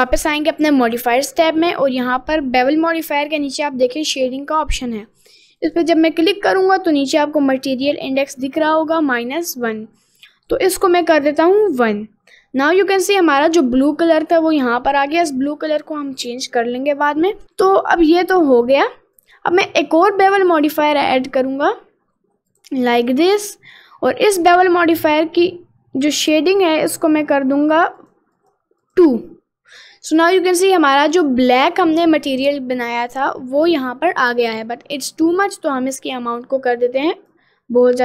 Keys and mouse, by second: 5.6 click, 11.1 click, 12.8 middle click, 19.2 click, 20.5 click, 21.0-22.8 drag, 26.6 click, 28.2 click, 28.6 click, 28.9 click, 30.0 middle click, 30.8 middle click, 33.1 middle click, 34.4 middle click, 36.2-37.4 drag.